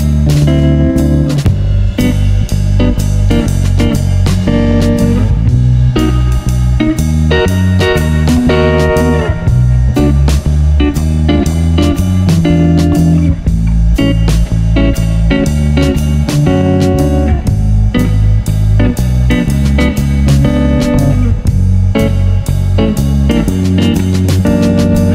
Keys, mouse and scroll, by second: 0.2-1.7 drag, 1.8 g, 2.0-3.4 drag, 5.4-7.9 drag, 6.6 g, 8.4-8.8 middle drag, 8.8-11.8 drag, 12.1 click, 12.1 g, 13.3 g, 14.0-14.5 drag, 16.2 shift+a, 17.5 drag, 17.9 click, 18.4 ctrl+p, 19.4 g, 20.5 ctrl+p, 21.2 g, 22.8 click, 23.9-25.1 drag.